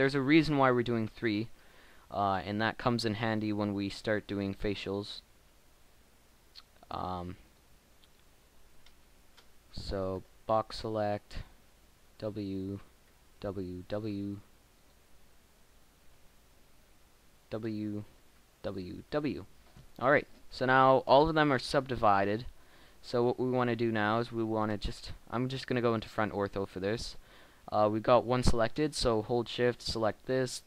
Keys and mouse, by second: 1.7 e, 2.8 click, 3.6 w, 4.7 w, 4.9 w, 6.5 Tab, 7.7 Tab, 10.1 b, 11.7 w, 13.0 w, 13.6 w, 14.8 Tab, 16.0 Tab, 16.1 b, 17.4 w, 18.4 w, 19.3 w, 22.2 Tab, 24.5 KP_1.